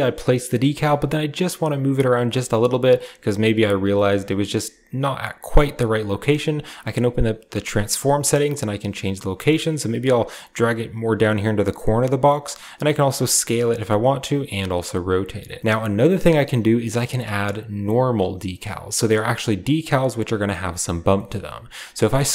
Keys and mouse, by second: 5.2-6.2 shift+drag, 7.1-9.1 shift+drag, 9.5-11.6 shift+drag, 12.3 shift+click, 13.8-15.4 shift+drag, 15.6-15.9 drag, 16.3 drag, 17.8 middle drag, 18.5 drag, 20.2 click, 21.0 shift+click.